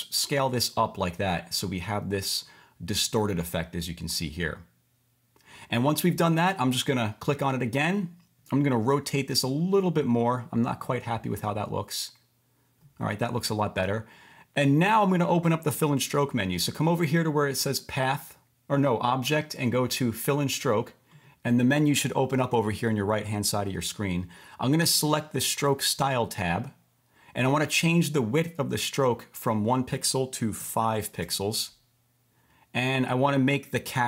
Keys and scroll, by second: 21.8 v.